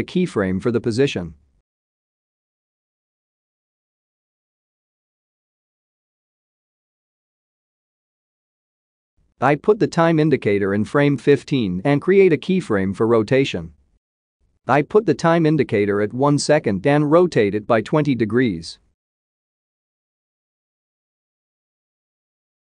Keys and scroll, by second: 19.7-21.3 typing.